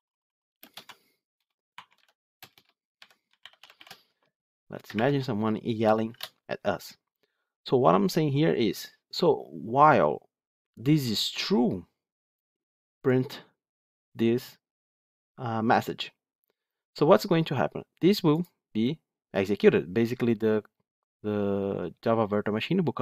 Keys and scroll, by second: 18.3 ctrl+F8.